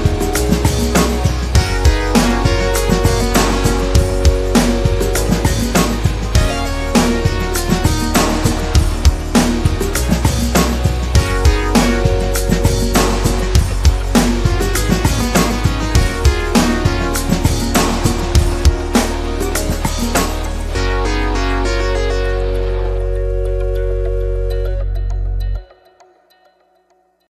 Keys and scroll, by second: 13.3-14.6 typing, 16.8-17.2 typing.